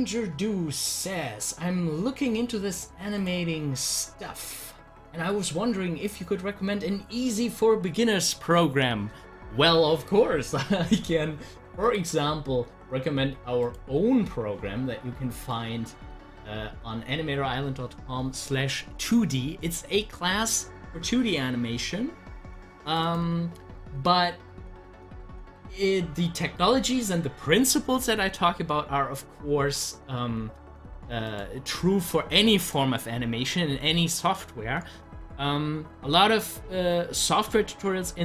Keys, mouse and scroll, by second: 3.1 click, 11.8-18.4 drag, 22.9 click, 23.0 double click, 31.3 click, 36.2 click, 37.3 ctrl+z.